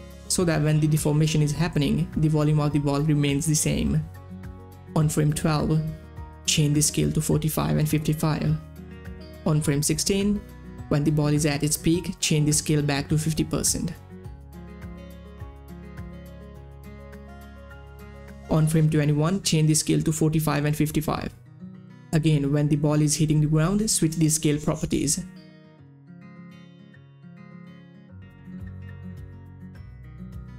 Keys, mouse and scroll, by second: 0.0-0.8 typing, 1.9 Page_Down, 5.0 Page_Down, 5.6-6.4 typing, 6.8 Tab, 7.8 typing, 9.7-13.3 drag, 13.8 click, 14.5 5, 15.0 Tab, 15.7 6, 17.2 5, 17.5 Return, 19.0 click, 19.8 Page_Down, 21.2 Page_Down, 21.2-22.2 typing, 22.9 Page_Down, 23.7 click, 23.8-25.5 typing, 25.6 Page_Down, 26.7 Page_Down, 28.6-29.4 typing, 28.6 click, 29.9 Tab.